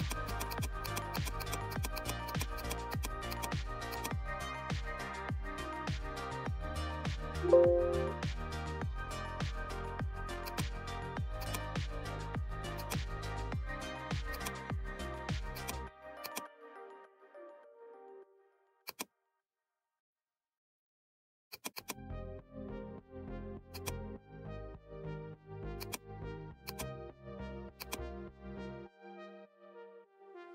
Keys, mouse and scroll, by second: 10.4-23.7 drag, 25.7 click, 25.8-30.1 drag.